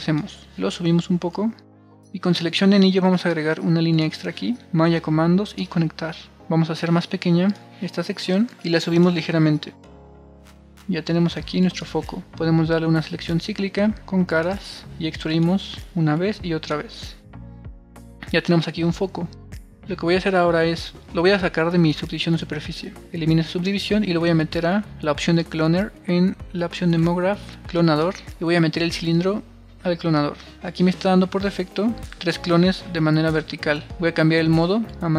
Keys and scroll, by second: 5.6 super+r, 10.1 super+r, 17.5 super+r, 23.5 BackSpace.